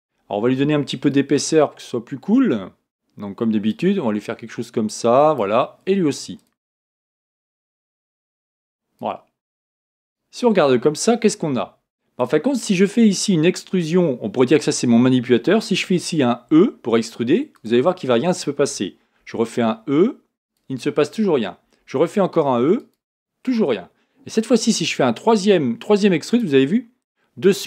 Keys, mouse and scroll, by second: 1.0 Tab, 3.7-6.4 drag, 7.9-10.6 drag, 10.6 Tab, 12.2-15.2 drag, 16.5 e, 19.2 e.